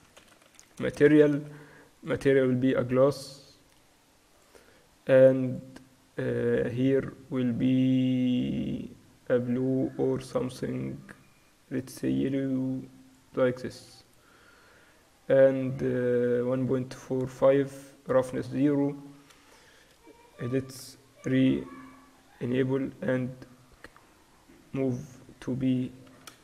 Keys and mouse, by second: 0.7 s, 2.0-8.4 drag, 16.7-18.8 drag, 20.0-21.3 middle drag, 21.3 KP_Divide, 23.4 middle click, 24.1-25.1 drag, 26.1 s.